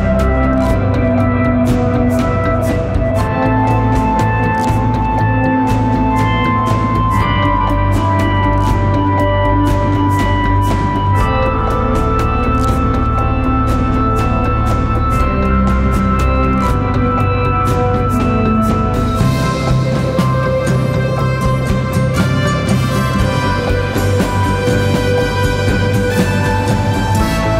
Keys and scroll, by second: 1.7 ], 3.5 ctrl+z, 4.5 4, 5.6-6.9 typing, 8.1 4, 10.5 3, 13.0 ctrl+d, 13.2 Escape, 14.0 ], 15.5 4, 16.0 ctrl+z, 19.3 ctrl+z, 19.6 ctrl+d, 19.7 Escape, 21.5 ], 22.8 4, 24.5 3, 24.9 ], 27.0 ].